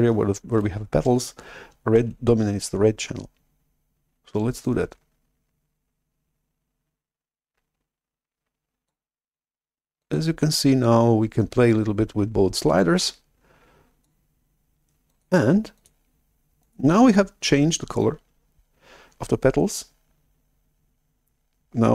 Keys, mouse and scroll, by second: 2.0 shift+super+F11, 4.6-8.8 drag, 10.0 click, 11.4 click, 15.0 click, 15.6 click, 16.5 click, 17.0 click.